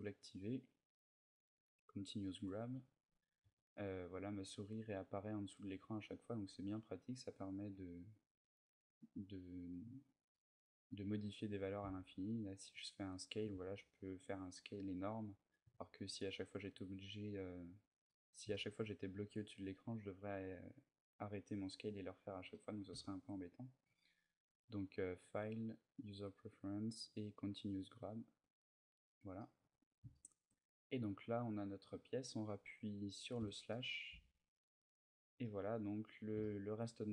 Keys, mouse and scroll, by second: 3.1 g, 6.8 right click, 9.0-10.1 scroll down 3, 9.5 middle click, 10.1 middle click, 10.6-11.1 scroll up 4, 11.2 scroll down 1, 11.5 s, 14.8 right click, 17.8 middle click, 18.2 shift+middle click, 22.2 middle click, 22.8 shift+middle click, 24.9 click, 29.1 middle click, 29.3 Tab, 29.6-30.3 scroll down 2, 29.9 shift+middle click, 30.3 middle click, 33.1 KP_Divide, 33.8 a, 34.3 middle click, 34.8-35.4 scroll down 3, 35.1 middle click, 36.1 shift+middle click, 36.9 scroll up 2.